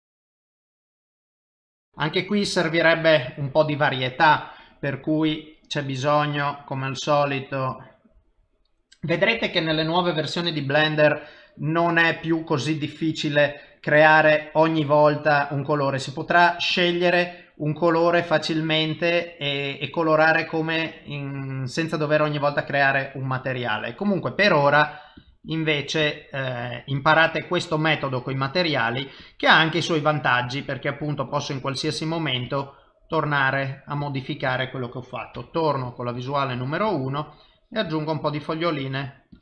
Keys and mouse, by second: 2.2 click, 2.8 click, 3.0 click, 3.4 click, 4.7 click, 8.8 typing, 14.3 click, 16.7 click, 19.6 click, 22.6 click, 24.4-25.5 click, 25.7 click, 27.0 click, 27.3 click, 28.0 click, 28.3 click, 29.5 click, 30.5 click, 31.3 click, 31.6 click, 32.5 click, 33.4 click, 34.5 click, 34.7 click, 35.3 KP_1, 35.9 click, 36.2 click, 36.9 click, 37.2 click, 37.7 typing, 37.9 click, 38.2 click, 38.8 click, 39.1 click, 39.3 click.